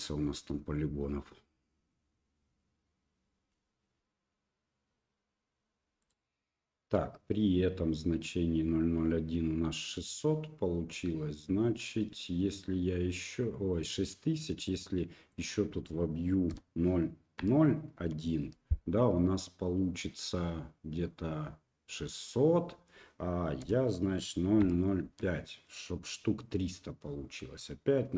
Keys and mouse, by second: 14.8-28.1 drag.